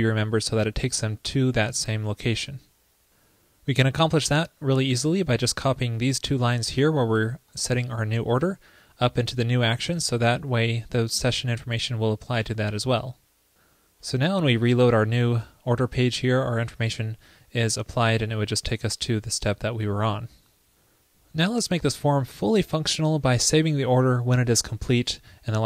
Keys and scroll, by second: 7.0 super+c, 8.2 super+v, 10.1 super+s, 15.3 super+r.